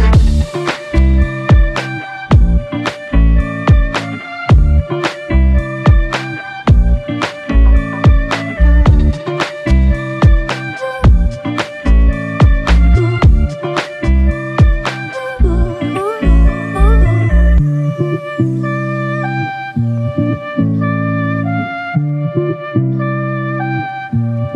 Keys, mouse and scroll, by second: 0.9 ctrl+click, 8.9 ctrl+alt+click, 14.7 ctrl+click, 15.7 ctrl+click, 20.3 alt+click.